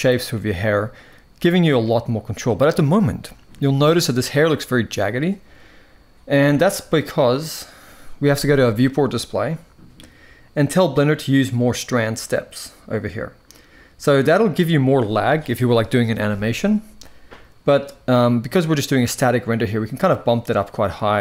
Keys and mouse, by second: 0.1-1.5 middle drag, 3.4 shift+middle click, 8.6 click, 11.3 click, 12.0 click, 20.8-21.2 middle drag.